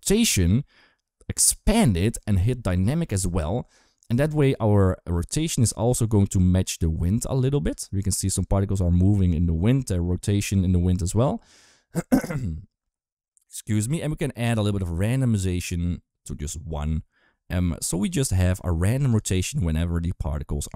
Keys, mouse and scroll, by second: 0.3 click, 3.0 click, 4.2 click, 5.2 space, 7.5 space, 8.1 space, 11.8 click, 11.8 space, 14.3 click, 18.4 click, 18.9 space.